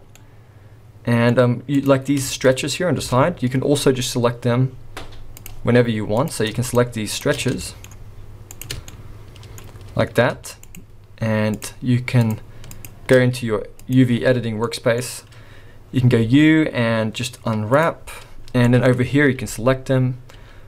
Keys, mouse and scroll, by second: 0.2 middle click, 1.4-1.9 scroll up 2, 1.8 click, 2.3 shift+middle click, 2.5 scroll up 3, 3.1 Tab, 5.4 click, 6.2 click, 6.7 shift+click, 7.1 shift+click, 7.4 scroll down 3, 7.6 shift+middle click, 8.5 shift+click, 8.9 middle click, 10.6 shift+click, 11.5 shift+click, 12.2 shift+click, 12.7 shift+click.